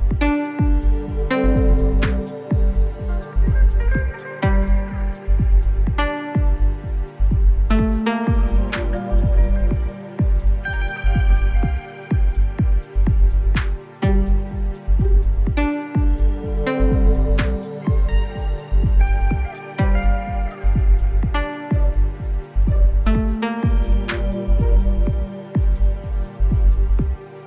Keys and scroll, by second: 3.7 space, 9.1 space, 13.9-14.4 [, 20.0 space, 20.5 alt+space, 21.8 alt+space.